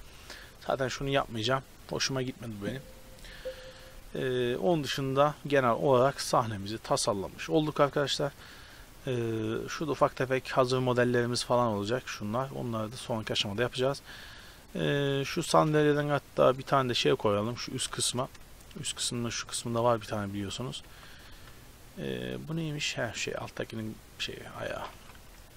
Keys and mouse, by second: 4.7 ctrl+s, 6.1-7.8 drag, 7.8 a, 14.7-16.4 right drag, 15.8 shift+d, 16.4 drag, 18.0 shift+space, 21.0 g, 24.8 r.